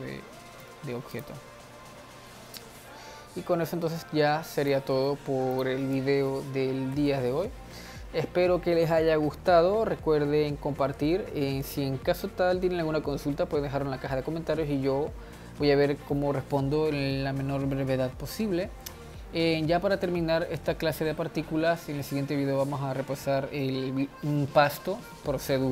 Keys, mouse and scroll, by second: 0.5-1.8 middle drag, 1.8-3.7 drag, 4.6-6.2 drag, 7.6 ctrl+s.